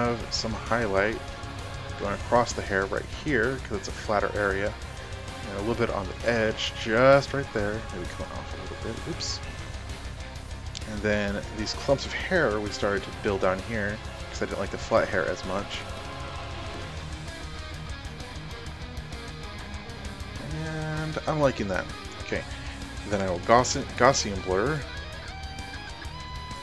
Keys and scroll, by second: 9.7 ctrl+alt+z, 23.0 ctrl+shift+g.